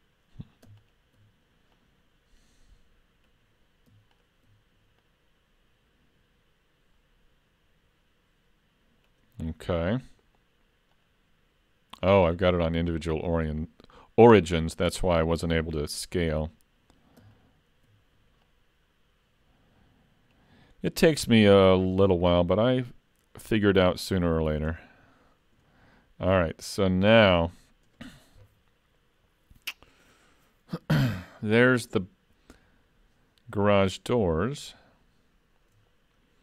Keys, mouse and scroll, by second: 0.8 alt+click, 1.8 click, 4.2 alt+click, 5.1 click, 10.9 click, 17.4 alt+click, 18.5 click, 21.7 alt+click, 22.8 click, 34.2 shift+middle click.